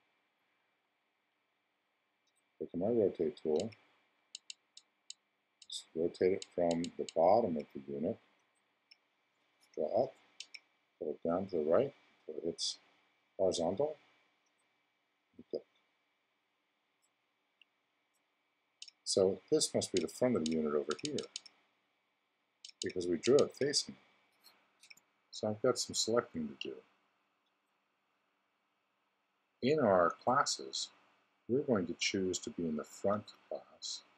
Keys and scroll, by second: 24.8 x.